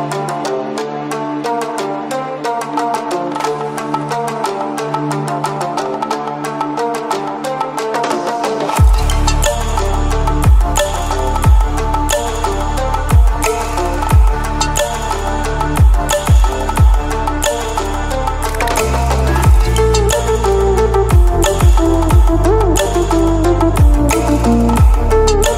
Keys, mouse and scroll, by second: 1.6 alt+p, 3.9 alt+click, 5.6 v, 5.9 click, 6.8 l, 8.6-9.9 alt+drag, 11.1 v, 12.0-13.8 drag, 15.7 shift+m, 16.9-17.4 alt+drag, 18.4 v, 20.5-21.3 drag, 25.1 click, 25.2 alt+scroll up 1.